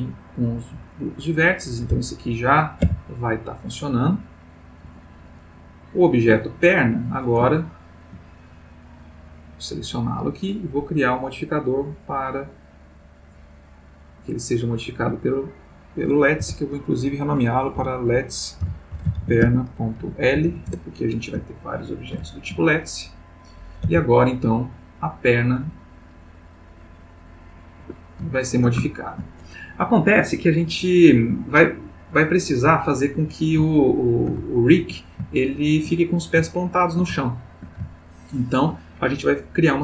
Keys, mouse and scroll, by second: 1.2 click, 2.8 r, 4.8 Escape, 5.5 click, 6.7 click, 7.5-8.3 ctrl+middle drag, 8.5 ctrl+click, 9.5 click, 11.2 click, 11.9 click, 13.1 click, 14.3 click, 15.3 click, 16.4 F2, 17.7 End, 18.6-20.4 typing, 20.6 shift+Return, 21.6-22.1 ctrl+middle drag, 22.3 ctrl+shift+middle click, 23.1 click, 23.8 r, 27.8 Escape, 28.3-29.5 ctrl+middle drag, 33.7 ctrl+middle click, 34.1-35.1 ctrl+shift+middle drag, 35.3-36.1 ctrl+shift+middle drag, 36.6-37.8 ctrl+middle drag, 37.9-38.8 ctrl+shift+middle drag.